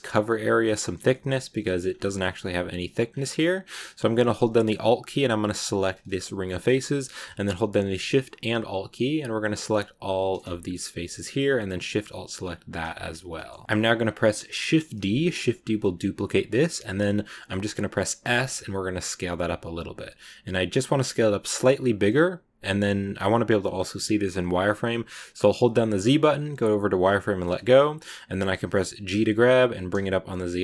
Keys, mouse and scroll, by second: 1.7 scroll up 2, 1.9-2.9 middle drag, 2.9 scroll down 2, 3.1 middle click, 3.6-5.6 scroll up 2, 5.6 alt+right click, 6.4-8.1 middle drag, 8.1 alt+shift+right click, 9.1 alt+shift+right click, 9.9 alt+shift+right click, 10.3-12.6 middle drag, 12.6 alt+shift+right click, 13.0-13.6 scroll down 1, 13.6-14.6 scroll up 1, 14.9 shift+d, 27.8 scroll up 1, 29.0 g.